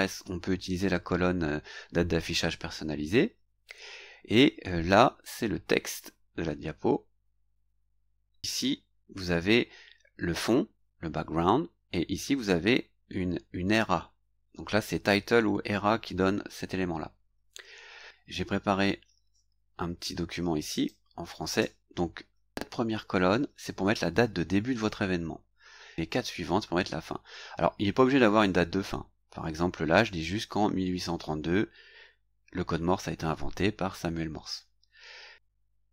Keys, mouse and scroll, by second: 20.8 click.